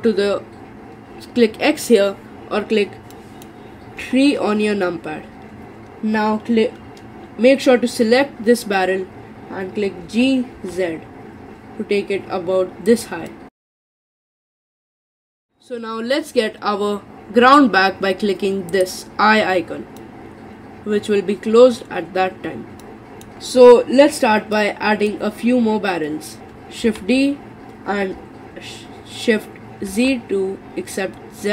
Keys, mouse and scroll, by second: 3.2 middle click, 4.0 KP_3, 10.0 g, 13.3-18.7 middle drag, 18.7 click, 20.0-26.8 middle drag, 26.8 shift+d.